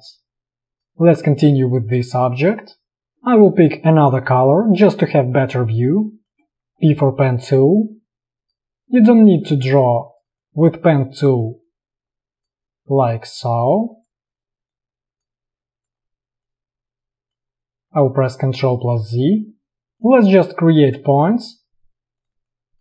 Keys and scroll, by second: 0.0 Delete, 0.7 space, 3.0 alt+space, 3.5 i, 4.7 v, 5.7 space, 6.7 p, 17.8 ctrl+z, 22.5 space.